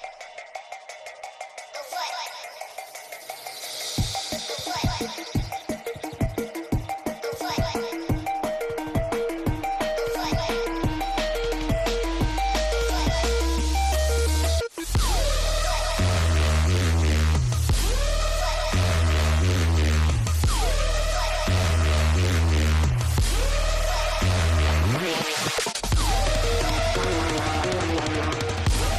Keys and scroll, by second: 21.5 F3, 24.3 space, 25.7 shift+F2, 27.3 F9.